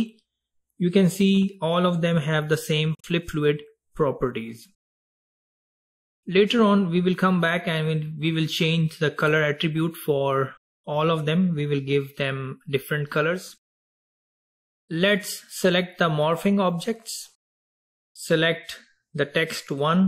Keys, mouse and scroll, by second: 7.3-8.4 scroll down 3, 8.4-9.1 scroll down 1, 14.6 click, 16.7 click.